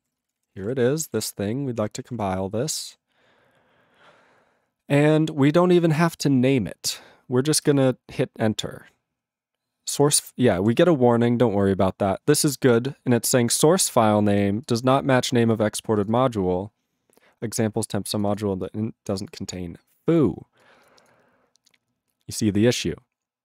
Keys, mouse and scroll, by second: 0.1 ctrl+space, 0.2 ctrl+e, 0.2 ctrl+n, 0.5 ctrl+e, 0.6 ctrl+g, 1.1 ctrl+=, 1.9 ctrl+p.